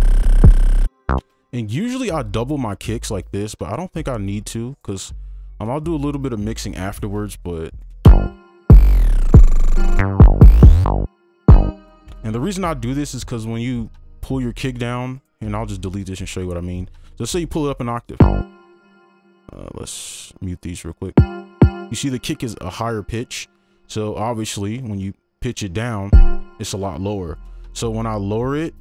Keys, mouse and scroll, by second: 1.0 ctrl+a, 1.2 space, 3.1 shift+click, 4.1-4.8 alt+scroll down 1, 7.5-8.0 alt+scroll down 1, 8.1 space, 10.3-11.0 alt+scroll down 1, 12.1 space, 15.5 Delete, 16.3 ctrl+click, 17.0 ctrl+Up, 18.4 space, 20.7 double click, 21.0 right click, 21.4 space, 21.8 space, 24.4 ctrl+a, 25.5 ctrl+Down, 26.4 space, 27.2 ctrl+Up.